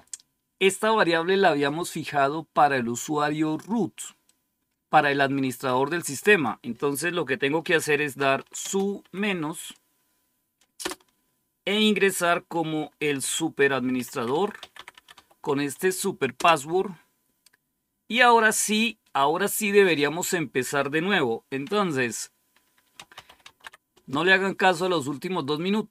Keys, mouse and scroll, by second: 4.1-5.6 drag, 6.1 click, 7.8-8.9 typing, 10.7 typing, 13.2-15.5 typing, 16.2 Return, 22.6-24.0 typing.